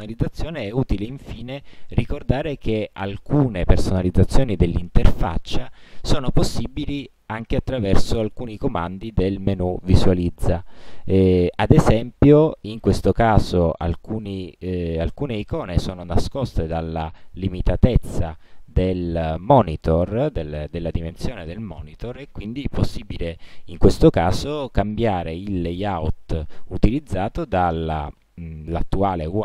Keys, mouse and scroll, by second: 3.4 right click, 10.3 click, 16.9 click, 19.1 click, 25.0 click.